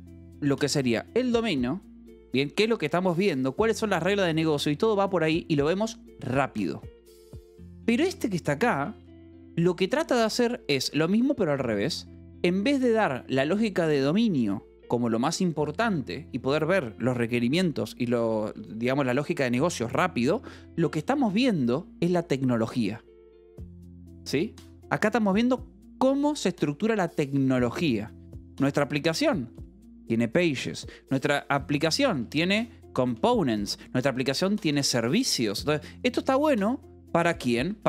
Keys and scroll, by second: 5.3 Escape, 7.5 k, 8.6 j, 9.0 k, 10.7 Escape, 13.0 j, 20.9 Escape, 28.8 Escape, 30.1-35.3 typing, 30.5 Escape, 33.5 Escape, 35.4 Escape, 36.3-37.8 typing.